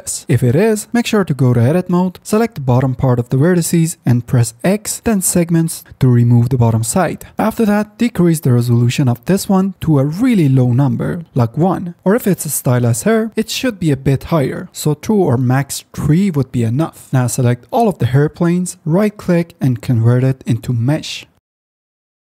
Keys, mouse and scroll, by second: 1.7 ctrl+z, 3.7 x, 4.6 x, 10.9 middle click, 12.8-14.6 middle drag, 15.9 middle click, 17.0-17.7 middle drag, 20.0 right click.